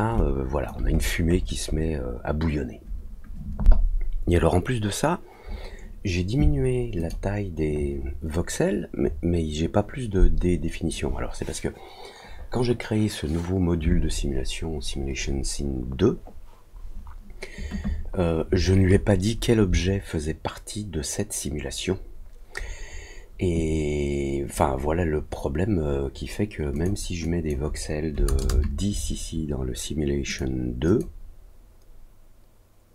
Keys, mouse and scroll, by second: 0.1 alt+click, 0.9 scroll down 1, 1.0 scroll up 1, 1.3-1.9 scroll down 4, 6.9 click, 26.7 click, 27.2 click, 30.2 click, 30.8 click.